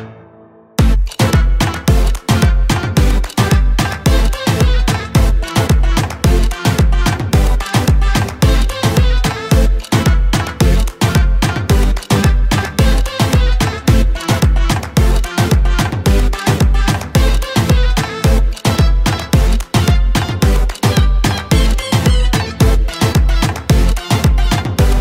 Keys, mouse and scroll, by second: 1.1 click, 1.7 right click, 3.3 click, 7.4 ctrl+z, 8.0 click, 8.8 ctrl+space, 9.0 ctrl+click, 9.6 ctrl+space, 10.7 click, 22.6 right click.